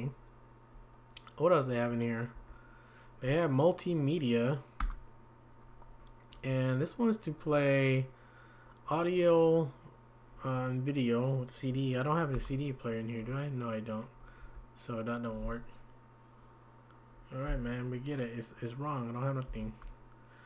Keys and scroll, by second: 2.3 Down, 12.3 Return, 17.5 Escape, 19.4 Down.